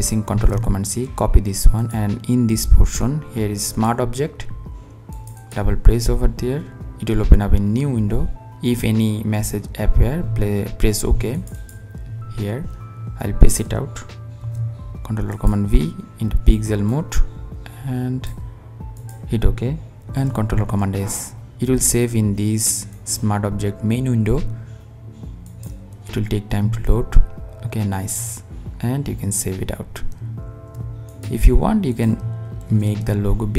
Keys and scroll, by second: 14.0 super+v, 19.7 super+s, 30.7 super+s.